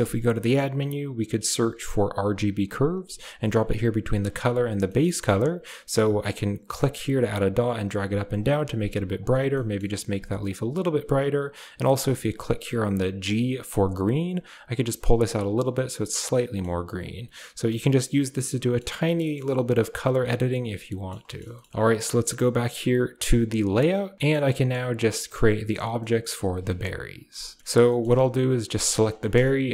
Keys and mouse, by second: 4.4 click, 4.7 middle click, 4.8 click, 6.6 click, 7.3 click, 7.9 click, 8.2 click, 8.5 click, 9.0 click, 9.5 middle click, 10.3 click, 13.1 click, 14.6 click, 15.1 click, 15.7-16.5 middle drag, 16.9 click, 17.6 m, 17.9 m, 18.3-18.7 drag, 19.0 click, 19.8 click, 20.1 a, 20.4-21.0 drag, 21.2 click, 21.4 shift+click, 21.7 ctrl+s, 23.3 click, 27.8 shift+middle drag, 28.8 click, 29.1 shift+middle drag, 29.6 r.